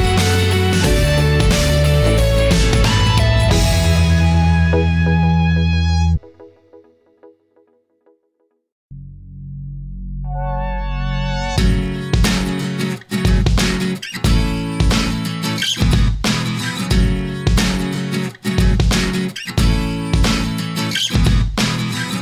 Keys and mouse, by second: 1.6-4.5 middle drag, 5.4 shift+middle click, 11.9-16.0 middle drag, 17.4-18.5 middle drag, 19.9-21.7 drag.